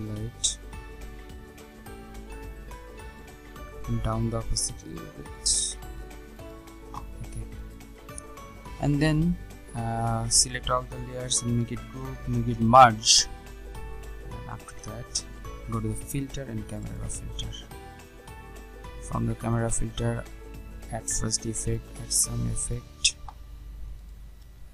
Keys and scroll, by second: 11.1 ctrl+g, 12.4 ctrl+alt+shift+e.